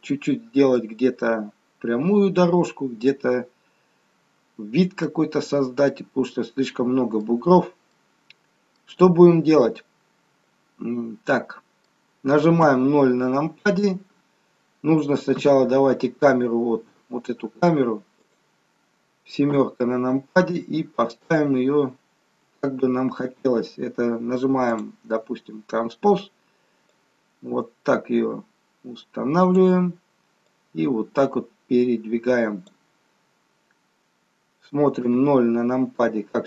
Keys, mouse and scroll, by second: 2.3-3.2 scroll down 3, 3.2 middle click, 5.3-5.9 scroll up 3, 7.0 middle click, 7.5-7.9 scroll down 3, 7.9 middle click, 9.6 middle click, 12.6 KP_0, 15.3 KP_0, 18.2 click, 19.4 KP_7, 20.7-21.3 scroll down 4, 22.8-23.8 scroll up 1, 23.8-24.3 scroll up 2, 24.6 click, 26.9 click, 30.6 click, 35.0 KP_0.